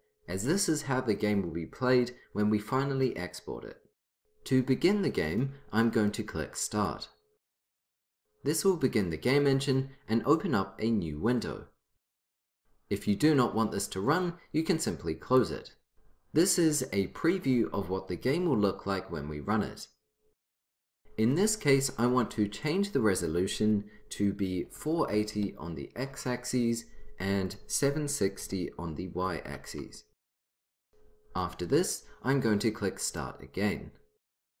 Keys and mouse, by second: 6.8-15.5 drag, 22.7-24.5 drag, 27.5-29.4 drag, 33.1-34.5 drag.